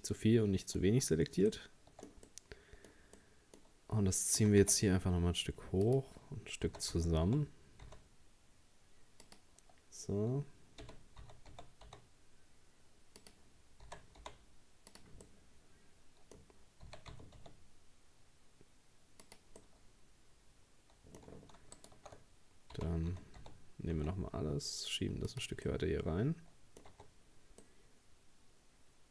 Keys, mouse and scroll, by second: 0.8-1.5 scroll up 2, 1.5-4.5 shift+middle drag, 4.5 g, 6.7 s, 10.8 g, 13.9 s, 15.3-16.9 middle drag, 16.9 s, 19.6-21.8 middle drag, 21.8 alt+shift+right click, 22.8 g, 25.7-27.0 middle drag, 27.0 Tab, 27.3-27.6 scroll down 1, 27.6-29.1 middle drag.